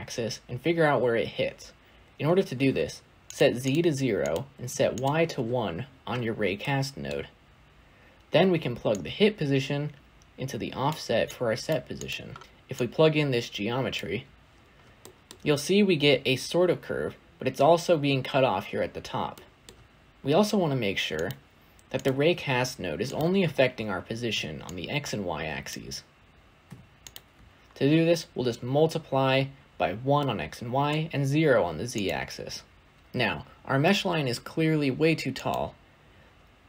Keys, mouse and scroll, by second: 2.0-3.5 scroll up 1, 3.5 click, 4.8-10.8 drag, 14.6 scroll down 1, 14.9-15.3 middle drag, 15.3-16.2 scroll down 1, 16.2-16.5 scroll up 2, 16.5-18.0 scroll down 2, 20.1 shift+a, 21.1 shift+a, 23.3-27.0 drag, 33.0 click.